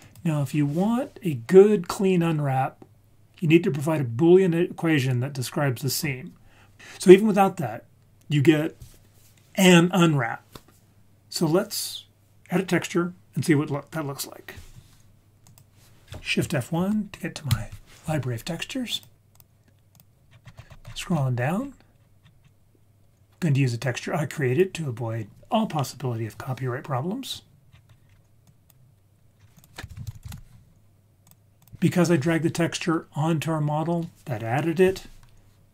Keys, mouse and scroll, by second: 0.0 click, 15.4 click, 16.8 shift+F1, 17.5 shift+F1, 18.9 click, 19.3-20.0 drag, 20.3-21.1 scroll down 9, 21.1 scroll up 1, 21.2-22.8 scroll down 6, 23.4 click, 27.7-28.2 scroll down 4, 28.1-28.4 scroll up 2, 28.4 click, 29.3 scroll up 2, 29.8 shift+click, 29.9 shift+a, 30.2 s, 33.2-35.7 scroll up 2.